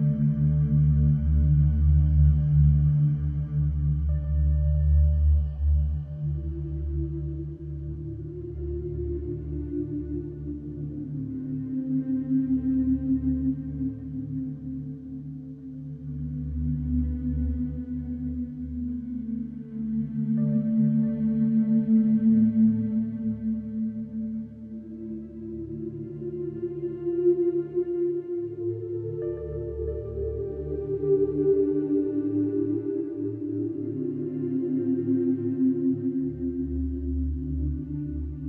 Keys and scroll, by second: 1.7 4, 4.4 3, 5.9 F1, 22.4 4, 24.8 3, 27.0 y, 27.1 space, 27.2 2, 34.1 4, 35.9 2.